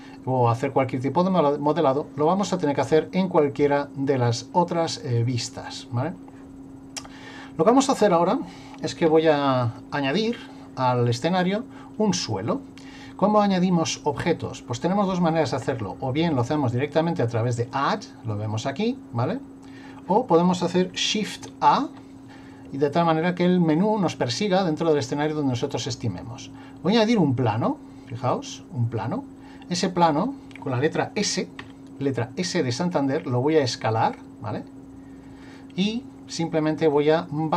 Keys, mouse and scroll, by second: 2.8 click, 9.1 Delete, 16.4 click, 17.6 click, 21.4 shift+a, 31.6 s, 36.9 click.